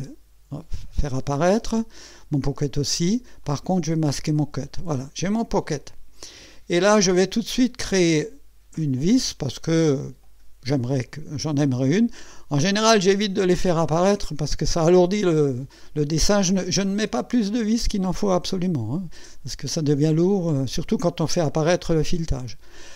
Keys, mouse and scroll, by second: 3.4 click, 3.9 space, 5.0-6.4 drag, 6.6 scroll down 1, 9.0 click.